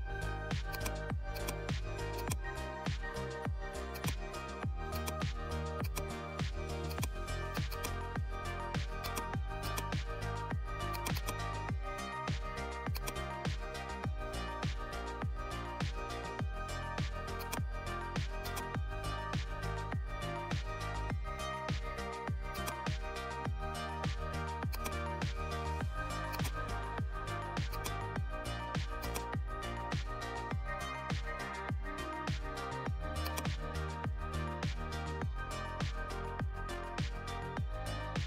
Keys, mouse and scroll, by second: 0.6-15.4 drag, 15.4-15.7 scroll up 1, 15.7 scroll down 1, 17.3-22.5 drag, 22.5 click, 23.0 right click, 24.7 click, 26.3-32.9 drag, 33.1 click, 34.6-35.9 typing, 37.5-38.2 typing.